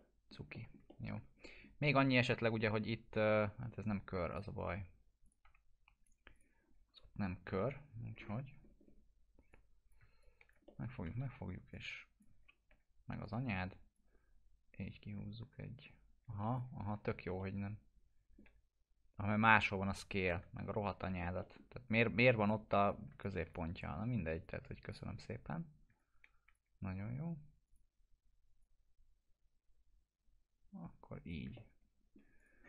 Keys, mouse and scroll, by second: 0.4 middle click, 0.8-3.6 alt+middle drag, 4.3-5.4 drag, 5.4 F4, 6.3 click, 7.4 t, 8.1 scroll up 1, 9.5-10.1 click, 10.6 middle click, 10.8-11.7 typing, 11.7-12.3 click, 12.6 ctrl+z, 13.2-16.7 drag, 16.8 ctrl+z, 17.4-18.6 alt+middle drag, 20.2 t, 20.9 scroll down 1, 21.4 middle click, 22.4-23.1 click, 23.2-23.8 ctrl+drag, 25.9-26.6 ctrl+drag, 31.5-32.1 alt+middle click, 32.4 click, 32.4 scroll down 1.